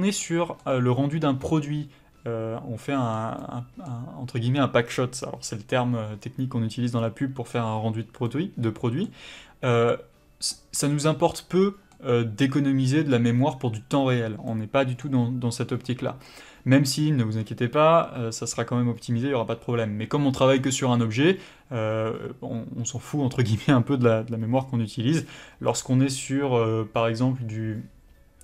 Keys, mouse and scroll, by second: 0.2 middle click.